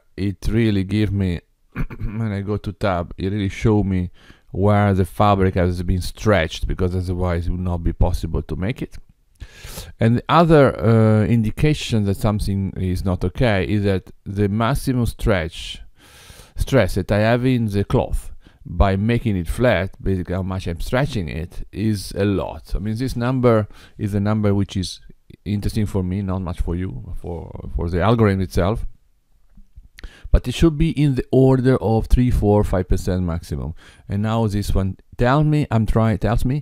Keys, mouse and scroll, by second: 2.6 Tab, 8.7 Tab.